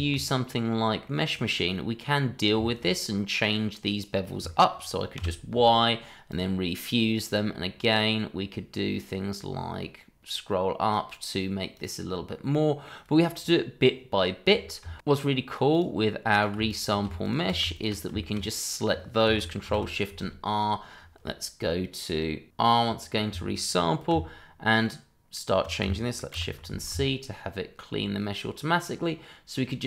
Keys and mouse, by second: 0.0 shift+middle click, 0.2-0.7 middle drag, 1.0 middle click, 2.6 shift+middle click, 5.2 y, 12.4 middle click, 15.0 ctrl+z, 15.2 Tab, 16.6 click, 16.9 click, 17.1 ctrl+drag, 17.4 shift+drag, 17.7 ctrl+click, 18.2 shift+middle click, 18.5 middle click, 19.6 ctrl+shift+r, 22.5 r, 26.3 shift+c.